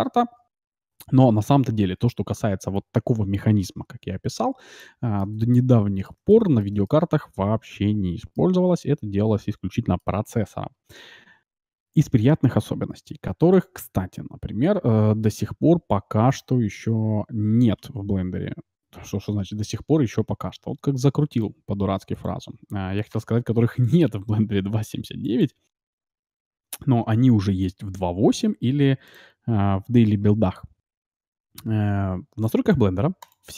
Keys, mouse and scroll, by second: 3.8 middle click, 4.4-4.9 scroll up 1, 4.9-8.6 middle drag, 8.8-11.5 middle drag, 13.5-15.5 drag.